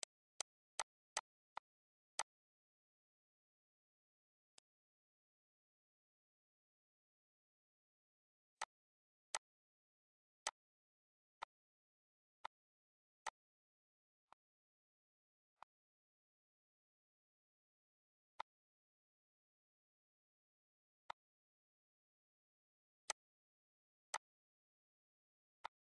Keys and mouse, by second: 0.5 shift+click, 3.1 click, 7.2 click, 7.9 click, 8.4 ctrl+s, 9.1 click, 10.0 click, 11.0 click, 11.7 click, 12.9 click, 14.1 click, 17.0 click, 19.5 click, 21.7 click, 22.8 click, 24.2 click.